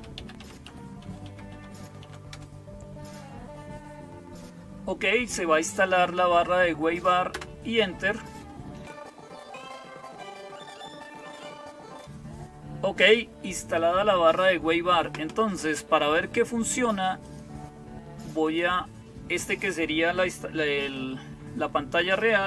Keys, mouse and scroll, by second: 0.0-22.4 typing, 7.2 Return, 17.1 click, 18.3 click.